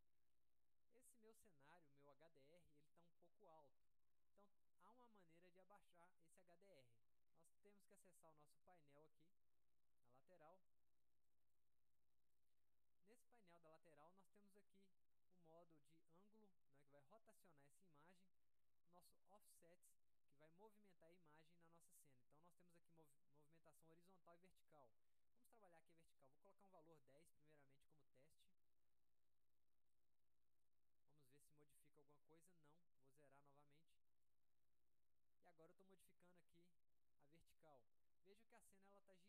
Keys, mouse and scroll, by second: 6.8 click, 8.2 click, 9.3 click, 10.4-10.9 drag, 11.5 click, 12.2 click, 22.8 click, 23.7 click, 25.0 click, 30.1 middle click, 33.2 right click, 34.0 click, 35.8 click.